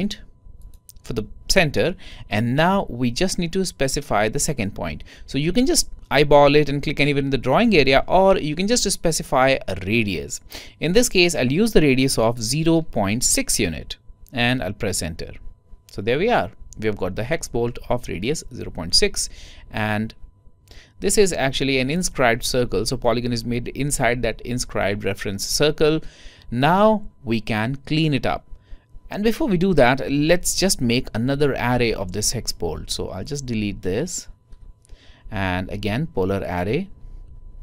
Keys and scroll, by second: 11.4-13.2 typing.